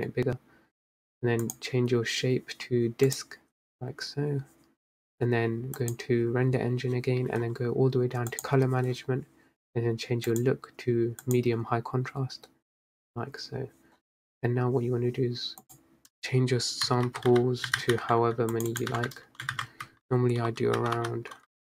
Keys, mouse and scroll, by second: 3.4-4.8 drag, 11.6-21.6 drag.